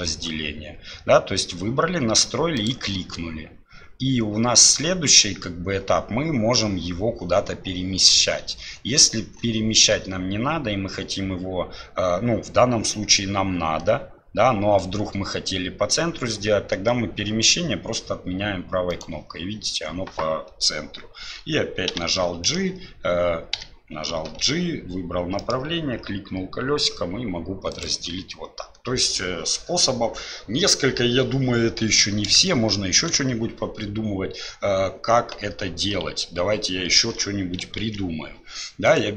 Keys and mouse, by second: 32.5 shift+click, 37.0 ctrl+z, 38.9 click.